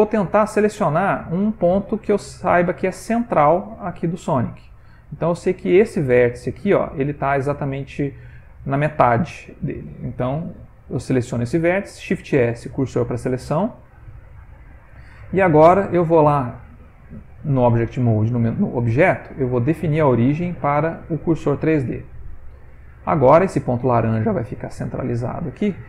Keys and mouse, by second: 0.8 middle click, 0.9 ctrl+middle click, 1.5 middle click, 1.7 ctrl+middle click, 2.5 ctrl+middle click, 2.7 ctrl+middle click, 3.0 shift+middle click, 3.2 shift+middle click, 3.5 ctrl+middle click, 4.2 middle click, 5.6 click, 6.3 middle click, 9.1 middle click, 11.5 middle click, 11.5 shift+s, 14.6 Tab, 18.4 click, 22.4 middle click, 23.8 middle click, 25.1 middle click.